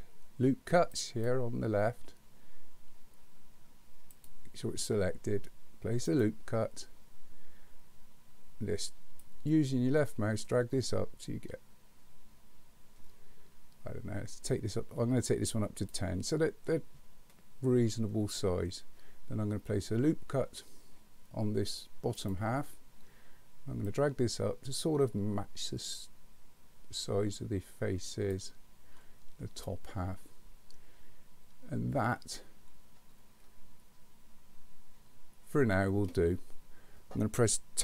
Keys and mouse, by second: 0.9 click, 6.1 click, 9.2-15.9 drag, 22.2 click, 24.0-28.3 drag.